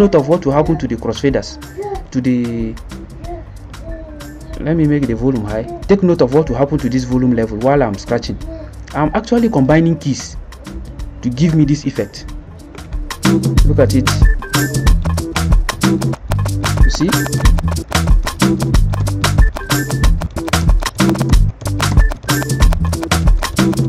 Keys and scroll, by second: 12.8 ctrl+c, 14.5-23.8 typing.